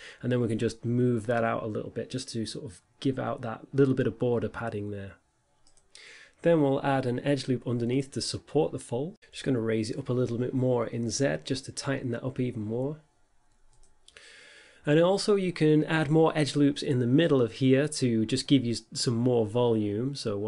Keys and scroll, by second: 0.8 shift+z, 11.3 Tab, 13.8 Tab, 14.3 g, 14.5 z, 15.5 Tab, 16.7 a, 18.4 Tab, 19.8 2.